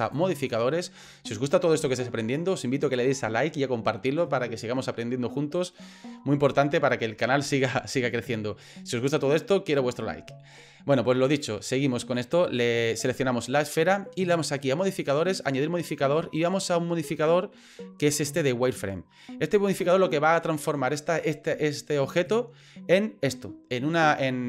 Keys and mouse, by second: 0.0-7.9 drag, 12.2 middle click, 15.4-22.3 drag, 24.2-24.4 middle drag.